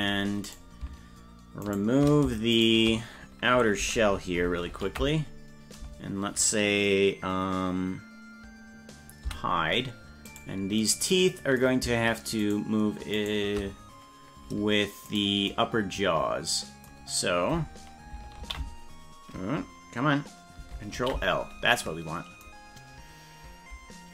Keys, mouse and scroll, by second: 0.5 right click, 1.8 shift+right click, 2.8 right click, 4.7 ctrl+l, 9.3 h, 10.3 right click, 12.5 shift+right click, 13.3 shift+right click, 15.1 right click, 18.4 ctrl+;, 21.0 ctrl+l.